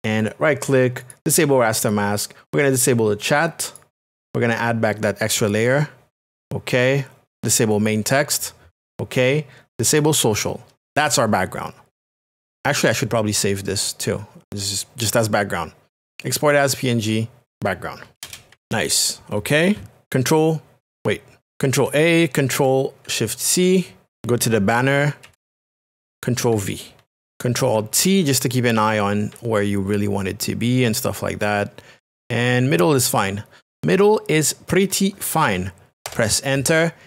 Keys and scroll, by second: 18.1 d, 18.2 space, 18.5 b, 21.6 ctrl+a, 23.5 ctrl+c, 24.1 shift+Tab, 25.2 ctrl+v, 26.9 ctrl+t, 29.3 alt+shift+t, 36.0 Return.